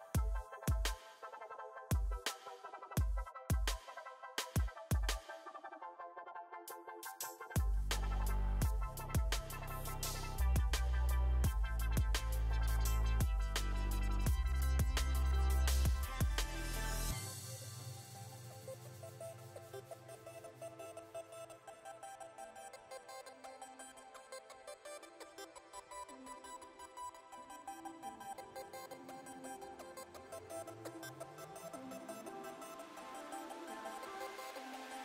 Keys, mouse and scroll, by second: 1.3-2.3 middle drag, 3.2-4.2 middle drag, 4.3 s, 5.4 KP_3, 5.7 KP_1, 7.4 s, 9.6 Tab, 10.0 click, 10.2-11.2 middle drag, 11.3 middle click, 11.5 middle click, 14.6 Tab, 15.1 middle click, 15.9 click, 17.8 click, 19.4-22.8 middle drag, 19.7 Tab, 22.3 click, 22.5 Tab, 23.3 middle click, 23.9 KP_1, 24.9 ctrl+r, 27.8 ctrl+z, 28.2 ctrl+r, 30.6 s, 32.8 Tab, 32.9 click, 33.8 middle click, 34.1 click, 34.3 Tab.